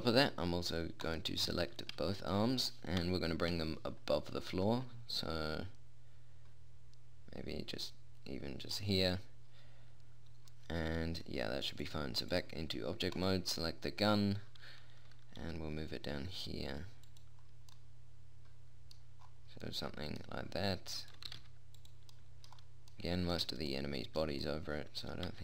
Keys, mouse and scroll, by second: 3.5 KP_1, 4.0 KP_3, 5.0 g, 12.2 typing, 13.0 click, 13.6 right click, 15.9 g, 17.9 click, 21.4 middle click, 21.6 click, 21.8 r, 23.0-25.4 middle drag.